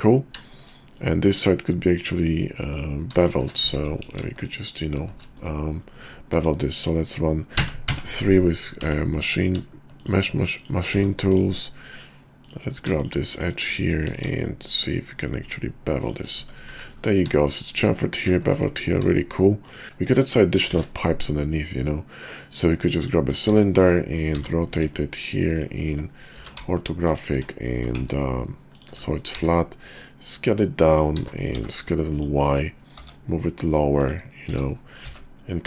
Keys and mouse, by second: 0.6 shift+click, 0.9 click, 1.9 click, 2.6 click, 3.1 shift+click, 3.6 `, 4.0 ctrl+b, 5.7 click, 6.3 Tab, 7.5 4, 7.9 3, 8.8 Tab, 9.2 click, 10.0 shift+click, 10.5 shift+click, 10.9 x, 12.3 click, 12.9 shift+click, 13.3 shift+click, 13.6 middle click, 14.1 ctrl+b, 16.4 Tab, 16.7 `, 17.3 shift+click, 18.4 shift+click, 19.1 shift+click, 19.6 click, 19.8 `, 20.6 shift+a, 23.5 `, 24.3 r, 26.4 r, 27.5 r, 29.3 s, 31.2 s, 32.9 g, 34.5 s.